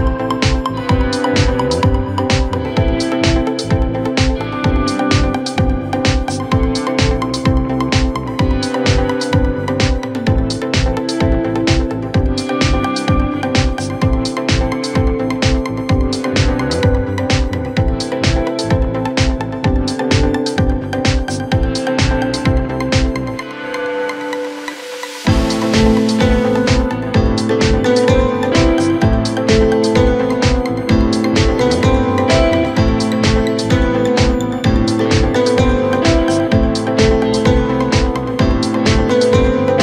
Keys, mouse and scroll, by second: 0.2 Tab, 0.9 1, 1.5 click, 2.2-2.6 scroll down 2, 2.6-3.6 scroll up 1, 3.6 e, 6.2 Tab, 6.7 scroll down 2, 6.9-7.7 middle drag, 7.7-8.7 scroll up 1, 8.7 KP_Divide, 9.2 KP_1, 10.2 s, 11.7 g, 13.9-14.9 scroll up 2, 14.9 s, 15.9 Tab, 16.6 a, 17.0-17.8 scroll up 2, 17.8 s, 19.1 g, 21.8 s, 23.8-24.2 scroll up 2, 24.2 g, 28.2 g, 31.2-32.2 scroll up 1, 32.2 click, 33.8-36.4 drag, 36.4-38.0 right drag, 38.0-38.5 scroll up 2, 38.5-39.5 scroll down 3, 39.5 a.